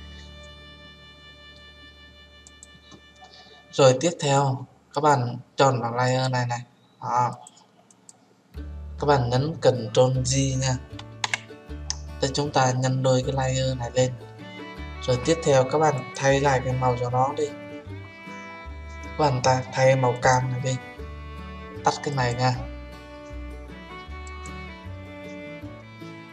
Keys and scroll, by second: 11.2 ctrl+j.